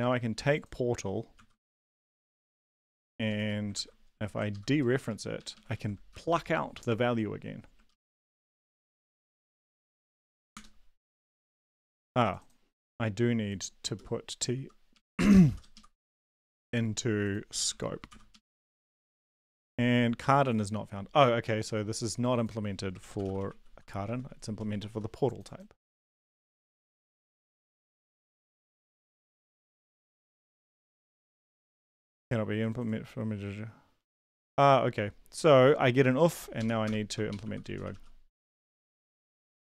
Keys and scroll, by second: 1.3 ctrl+c, 2.2-3.4 typing, 3.7 ctrl+v, 4.5 ctrl+Left, 4.7-5.5 typing, 5.7 ctrl+Right, 6.1 Delete, 7.9 ctrl+Left, 8.0 ctrl+Left, 8.2 ctrl+Left, 8.7 ctrl+s, 10.0 ctrl+l, 10.3 Up, 10.5 Return, 14.0 Left, 14.5 Left, 14.9 Right, 15.4 shift+,, 15.4 shift+., 15.7 Left, 16.0 shift+t, 16.2 Right, 16.5 ctrl+s, 18.1 ctrl+l, 18.3 Up, 18.5 Return, 22.8-24.2 typing, 26.2 ctrl+c, 28.1 ctrl+v, 28.3 ctrl+s, 29.4 ctrl+l, 29.6 Up, 29.8 Return, 36.6 Up, 36.8 Return, 37.0-39.7 typing.